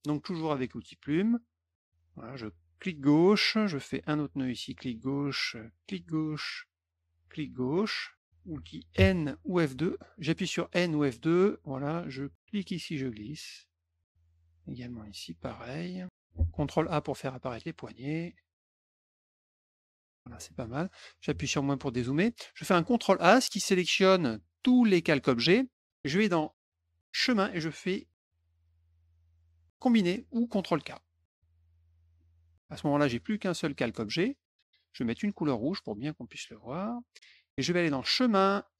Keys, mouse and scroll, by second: 1.6 click, 2.7 click, 4.7 click, 5.8 click, 7.2 click, 12.4-14.0 drag, 14.6-15.7 drag, 16.7 ctrl+a, 17.9 click, 19.2 click, 20.9 F1, 22.1 middle click, 22.7 ctrl+a, 27.1 click, 31.3 click, 32.1 middle click, 36.5 click, 38.0 click.